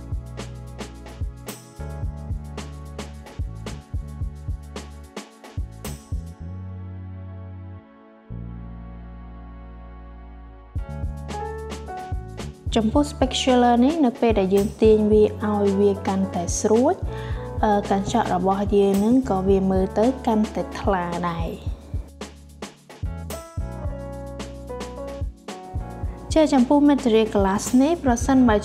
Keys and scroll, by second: 2.5 7, 2.8 0.